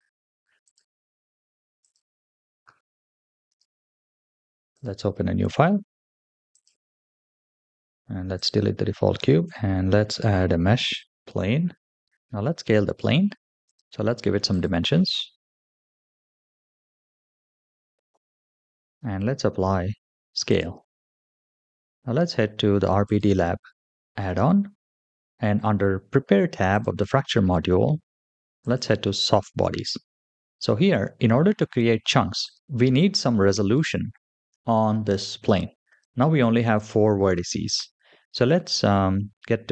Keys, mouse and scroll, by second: 0.6 click, 1.7 click, 3.3-6.6 middle drag, 7.8-9.2 typing, 13.5 click, 14.4-16.1 drag, 17.1-18.2 drag, 19.7 ctrl+a, 22.9 click, 26.6 click, 28.5 click, 32.3 click, 35.7 click.